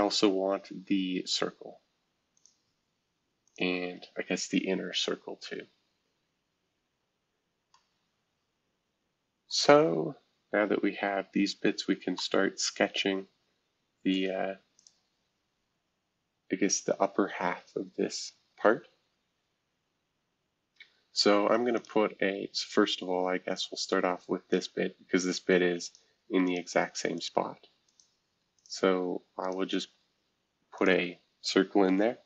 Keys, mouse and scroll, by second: 0.0-0.6 scroll down 2, 0.6-2.2 scroll up 2, 2.3 click, 3.4 click, 5.2 Escape, 6.7 scroll down 2, 7.4 scroll up 2, 9.5-11.0 middle drag, 11.5 scroll up 3, 14.1 middle click, 14.8 click, 15.8-16.5 scroll down 1, 16.5-17.4 scroll up 1, 18.1-18.8 scroll down 1, 18.8 scroll up 2, 21.7 click, 22.5 scroll up 2, 23.5 click, 24.5 click, 25.1 Escape, 25.8 click, 26.4 shift+click, 27.1 click, 28.3 shift+click, 29.8 e, 30.7 click.